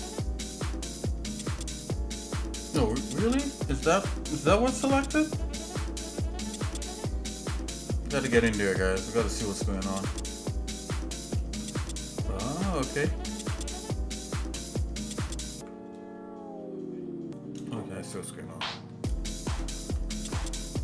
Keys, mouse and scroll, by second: 4.0 shift+middle click, 4.7 scroll up 2, 5.5 scroll down 1, 7.6 KP_Decimal, 8.6 middle click, 9.3 scroll up 1, 9.8-11.4 shift+middle drag, 13.6 ctrl+z, 14.6 ctrl+z, 17.8 shift+middle click, 20.0 ctrl+b.